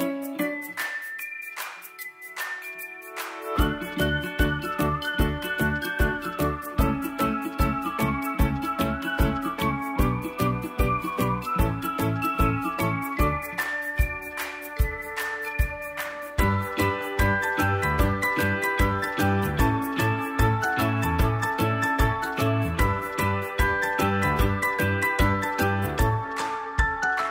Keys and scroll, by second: 7.9 ctrl+shift+j, 9.9 ctrl+j, 20.9 End.